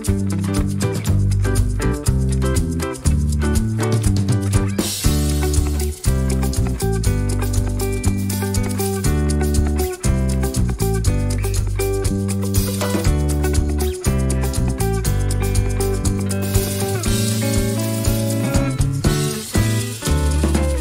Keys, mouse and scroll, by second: 0.8 click, 1.4 click, 2.4 click, 3.4 shift+click, 3.9-5.5 ctrl+shift+drag, 5.6 ctrl+click, 6.5 shift+click, 7.8 ctrl+shift+click, 8.7-13.0 ctrl+shift+drag, 13.4 click, 14.5-15.1 ctrl+scroll up 2, 16.1-17.6 ctrl+shift+drag, 17.8 ctrl+shift+click, 18.7 click, 19.9 click.